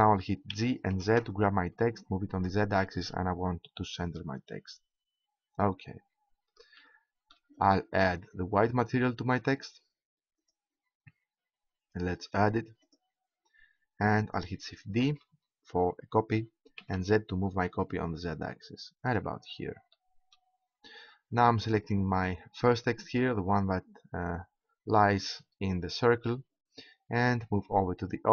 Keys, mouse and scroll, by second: 0.4 g, 4.1-6.2 drag, 6.8-9.4 middle drag, 9.4-10.8 drag, 10.8-12.1 right drag, 15.1 shift+d, 19.5 click, 22.6-24.1 right drag.